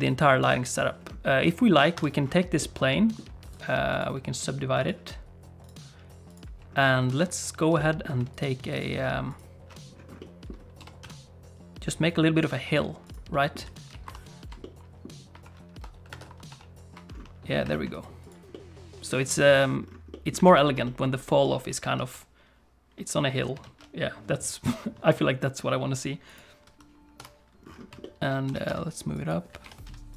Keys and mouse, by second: 1.9 Tab, 2.6 middle click, 3.5 right click, 4.8 Tab, 4.8 click, 5.6 click, 6.3 click, 7.8 middle click, 8.7 alt+shift+click, 10.2 middle click, 10.8 g, 13.3 middle click, 13.6 a, 14.0 ctrl+t, 14.6 middle click, 16.1 Tab, 16.5 ctrl+3, 17.7 shift+click, 17.9 right click, 18.5 middle click, 19.1 click, 20.1 click, 20.4 alt+a, 20.6 shift+click, 20.8 click, 26.3 alt+shift+click, 27.2 KP_1, 28.0 shift+click, 28.4 g, 29.6 g.